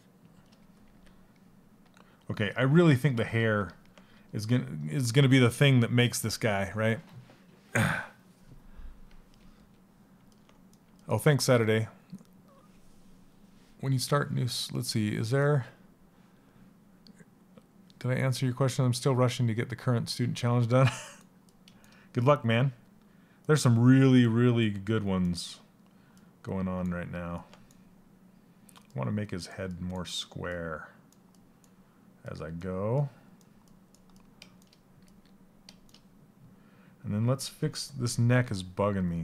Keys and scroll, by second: 34.6 s.